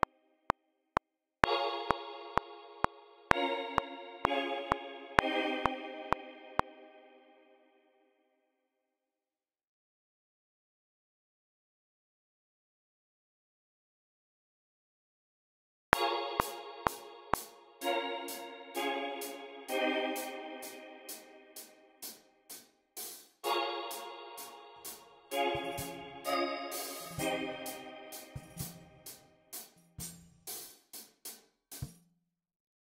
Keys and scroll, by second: 0.4 alt+super+s, 6.5 space, 10.5 y, 15.8-19.0 typing, 30.7 f, 31.6 space, 31.9 f.